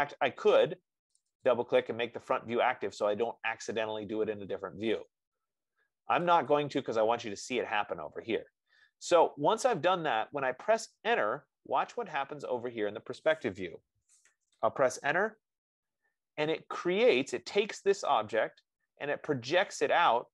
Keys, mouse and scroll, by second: 1.5 click, 2.2 click, 6.6 click, 7.2 click, 13.2 F15, 15.4 Return, 18.6 click.